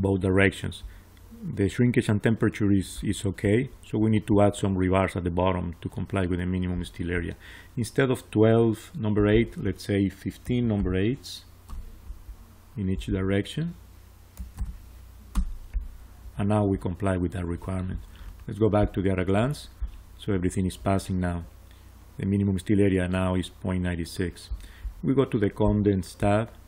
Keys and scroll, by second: 10.3 1, 10.6 5, 11.5 Return, 13.9-14.9 typing, 15.2 Return.